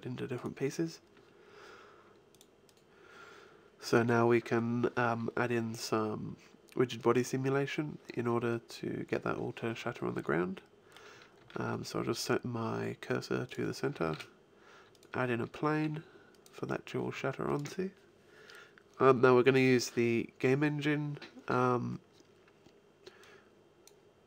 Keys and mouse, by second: 10.4 middle click, 11.2 shift+s, 13.9 shift+a, 15.6 s, 16.8 s, 17.4-19.3 drag, 23.1-24.2 drag.